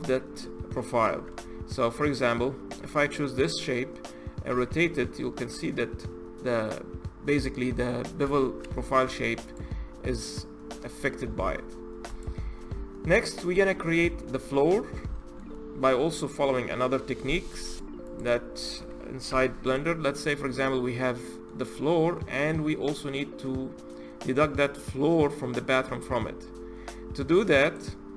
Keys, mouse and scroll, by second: 1.1 Tab, 3.2 click, 4.3 r, 8.8 Tab, 9.2 click, 9.6-11.2 scroll down 7, 11.2-11.9 middle drag, 11.9 click, 12.2-12.7 scroll down 5, 12.7-14.4 middle drag, 14.4-14.9 scroll up 2, 14.9-17.4 shift+middle drag, 17.4 click, 17.8 click, 19.1 h, 19.4 click, 20.0 click, 20.3-22.4 middle drag, 22.4-23.1 scroll up 1, 23.1-26.2 middle drag, 27.4 click.